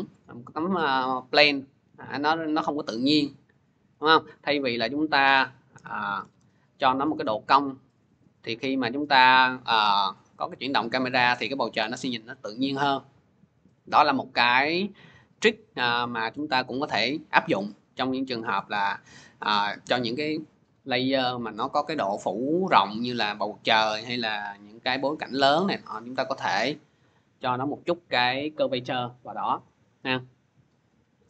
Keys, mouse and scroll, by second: 3.8 click, 5.0 click, 5.6-6.0 typing, 6.5 click, 11.5 click, 30.6 click.